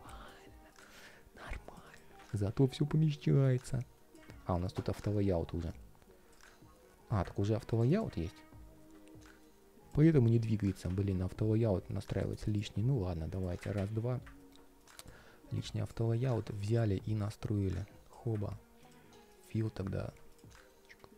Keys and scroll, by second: 0.8 ctrl+shift+4, 20.3 ctrl+shift+4.